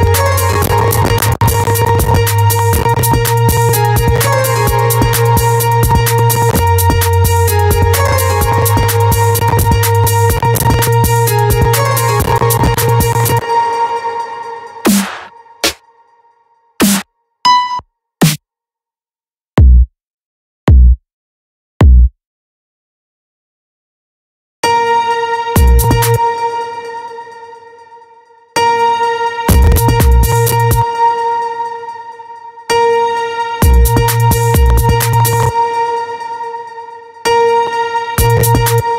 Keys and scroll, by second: 12.9 space, 24.0 space, 25.5 space, 28.0 space, 30.2 space, 32.1 space, 35.6 space, 36.7 space, 38.3 space.